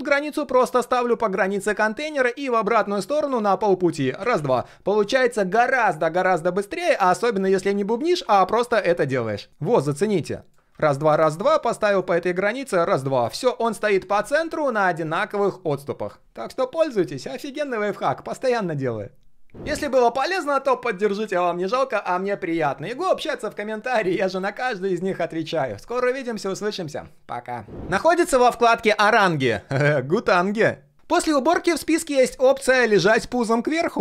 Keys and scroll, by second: 7.8 ctrl+z, 8.0 ctrl+z, 8.2 ctrl+z, 8.5 ctrl+z.